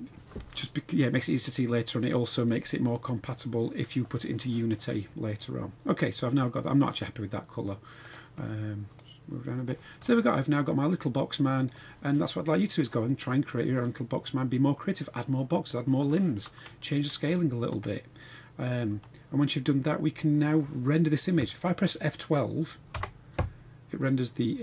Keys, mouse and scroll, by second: 5.3-6.9 middle drag, 8.0 click, 10.0-11.7 middle drag, 11.7 scroll down 1, 17.1-18.2 middle drag, 18.5 scroll down 2.